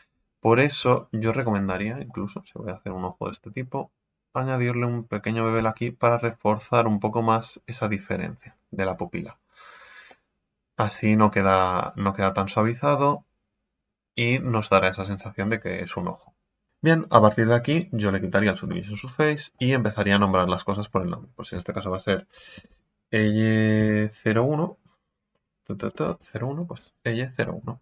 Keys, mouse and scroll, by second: 2.0 alt+shift+right click, 2.4 scroll down 3, 2.6 scroll up 1, 5.4 scroll down 3, 5.6 Tab, 6.0-8.3 middle drag, 8.3 scroll down 4, 10.1-14.7 middle drag, 14.7-15.1 scroll down 2, 15.1-18.6 middle drag, 18.6-19.2 drag, 19.2-20.7 shift+middle drag, 20.8-26.7 drag.